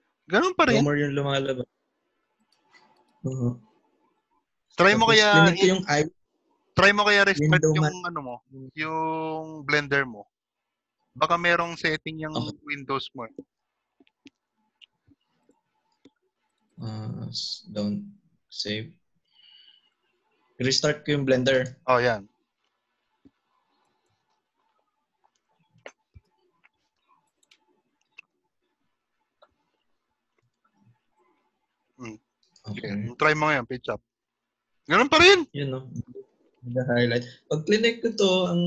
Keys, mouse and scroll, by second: 30.5 click.